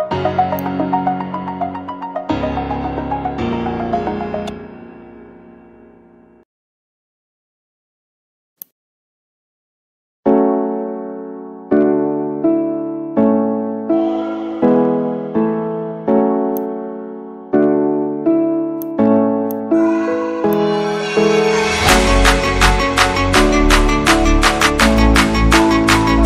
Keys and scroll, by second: 2.7-5.7 typing.